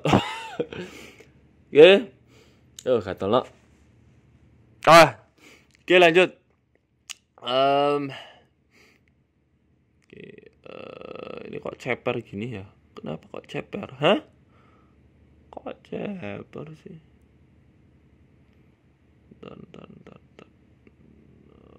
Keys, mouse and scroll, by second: 0.5 middle click, 1.2 shift+middle click, 1.5-2.2 scroll up 2, 1.9 Tab, 2.2 Tab, 2.4 a, 3.1 click, 3.4 middle click, 4.0 ctrl+a, 5.8 click, 7.0 middle click, 7.3 scroll up 3, 7.3 scroll down 1, 7.5 middle click, 8.0 ctrl+a, 9.0 KP_2, 9.0 KP_1, 11.8 e, 12.6 ctrl+z, 13.4 s, 14.0 middle click, 14.4 ctrl+a, 16.1 middle click, 21.0 click, 21.5 middle click.